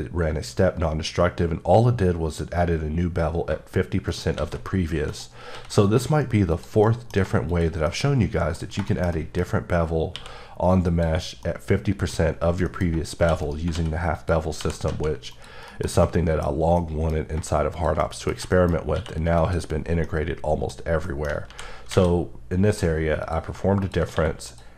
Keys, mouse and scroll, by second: 3.5 shift+click, 4.1 right click, 4.4 shift+a, 5.1 click, 5.5 s, 6.5 click, 6.9 middle click, 7.5 shift+click, 8.2-8.8 middle drag, 10.1 q, 10.8 click, 11.4 middle click, 12.4 scroll, 13.4 right click, 13.7 s, 14.1 click, 14.6 g, 14.8 z, 15.3 click, 15.7 KP_Decimal, 16.4 scroll down 3, 16.8 middle click, 17.1-17.7 scroll down 1, 17.7 click, 18.0 shift+middle click, 18.4 shift+scroll down 1, 18.5 shift+middle click, 18.9 q, 19.4 click, 20.1 middle click, 21.5 ctrl+z, 23.2 click, 23.5 shift+click, 24.1 q, 24.5 click.